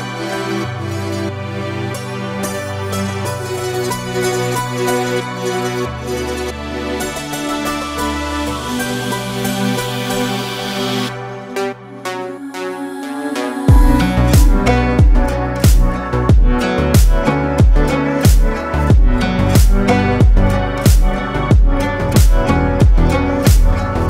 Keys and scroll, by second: 3.7 ctrl+z.